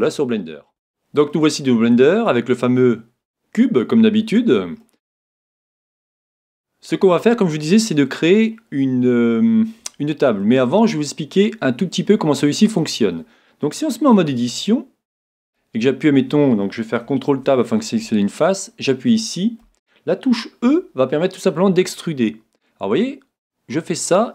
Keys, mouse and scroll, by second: 0.3 middle click, 1.3-3.1 middle drag, 4.4-6.2 middle drag, 7.7-9.5 middle drag, 10.4-12.3 middle drag, 14.3 Tab, 15.5-17.4 right drag, 17.3 ctrl+Tab, 18.5-20.3 right drag, 19.1-21.0 middle drag, 20.6 e.